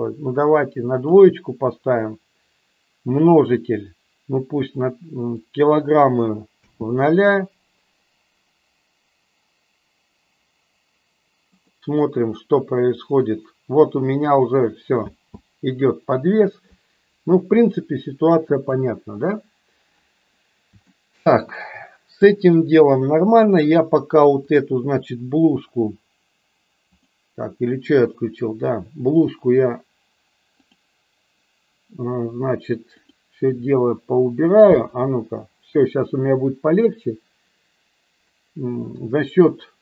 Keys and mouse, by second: 5.5 click, 6.6 space, 15.6 space, 18.7 click, 20.8 shift+middle click, 24.4 click, 26.8 click, 34.6 space.